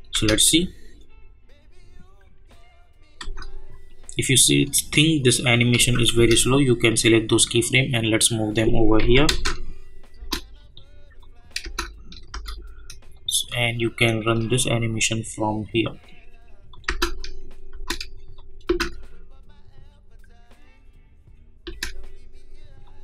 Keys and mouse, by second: 0.1 space, 3.2 space, 3.9-5.8 drag, 5.8 space, 6.5-9.0 drag, 9.0 j, 9.2 space, 11.2 click, 11.6 space, 13.1-16.7 drag, 16.8 space, 18.3 click, 18.6 space, 21.6 space, 22.8 click.